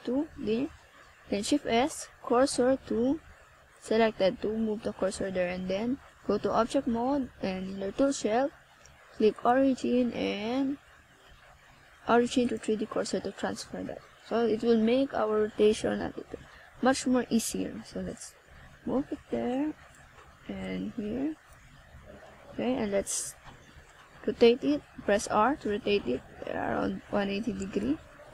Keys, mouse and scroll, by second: 1.4 c, 7.3 shift+right click, 7.9 z, 9.8 shift+right click, 10.4 z, 11.1 middle click, 12.1 z, 12.6 z, 14.6 click, 16.1 Tab, 16.5 middle click, 18.3 KP_0, 20.9 right click, 21.5 right click, 22.8 right click.